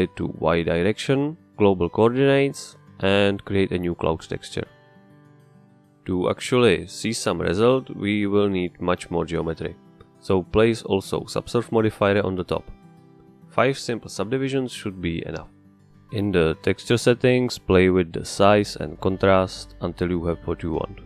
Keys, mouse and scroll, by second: 2.0-3.7 drag, 4.6 click, 5.4-6.9 drag, 7.5 click, 8.2-9.6 drag, 9.9 click, 10.9-12.6 drag, 12.8 click, 13.6 click, 15.0 click, 15.8 click, 17.2 click, 18.3-19.8 drag, 20.8 click.